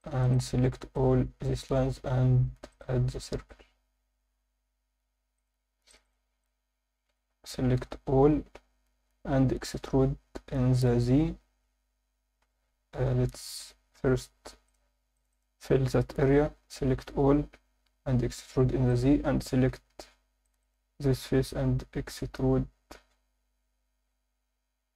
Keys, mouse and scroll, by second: 0.0 click, 0.3 click, 0.9-5.3 right drag, 5.3 click, 5.9 click, 6.4 alt+middle click, 8.2 a, 9.3 e, 15.1 click, 15.3 click, 16.3 f, 16.6 a, 17.8 e, 18.9 click, 20.4 click, 20.4 3, 20.6 click.